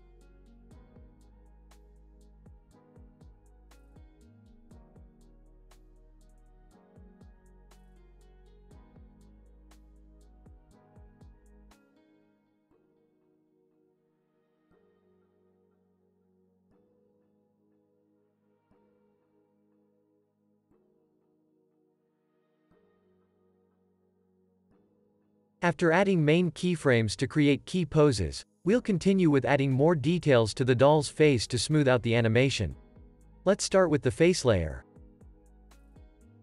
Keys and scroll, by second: 4.7 p, 5.8 p, 8.5 p, 11.4 z, 13.3 x, 15.9 z, 20.3 z, 20.8 x, 22.0 z, 22.4 x, 23.6 super+s, 25.7 space, 26.8 super+-, 27.5 space, 28.7 super+a, 34.9 u.